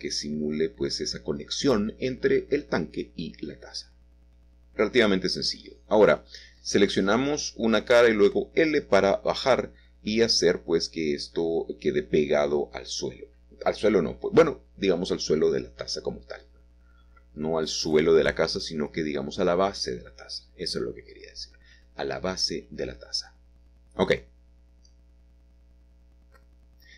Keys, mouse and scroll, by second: 0.5-1.8 middle drag, 1.9-2.4 scroll down 1, 2.4 middle click, 6.0 Tab, 6.5 click, 8.3 g, 10.5 shift+click, 10.8-12.0 shift+middle drag, 12.1 Tab, 16.2 typing, 25.5 click, 26.2 Tab, 26.6 Tab.